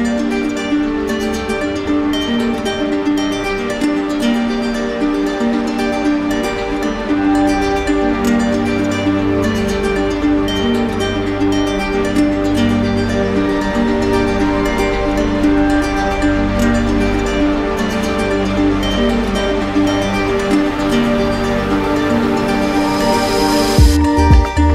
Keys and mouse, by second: 2.7-3.8 drag, 5.8-6.9 drag, 9.3-10.4 drag, 11.3-12.4 drag, 14.4-15.5 drag, 20.7-21.8 drag, 23.3-24.3 drag.